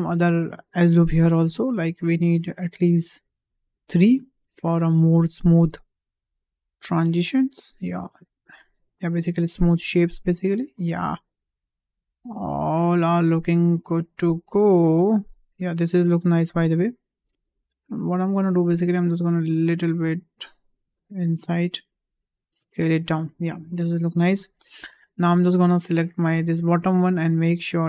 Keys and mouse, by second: 0.2 click, 0.9 click, 1.9 click, 3.7 click, 4.9 click, 5.6 click, 6.4 s, 8.9 click, 9.7 s, 11.3 click, 11.9 s, 13.7 click, 14.3 s, 17.9 ctrl+z, 18.5 click, 19.2 s, 21.2 click, 21.8 s, 23.2 click, 23.8 shift+middle click, 24.8 shift+middle click, 25.3 click, 26.8-27.8 drag.